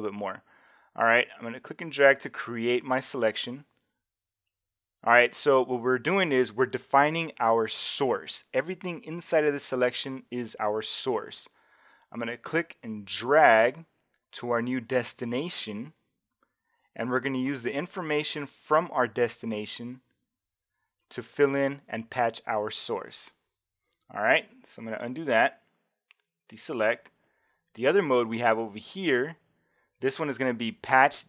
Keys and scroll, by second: 25.2 alt+super+z, 26.4 alt+super+d.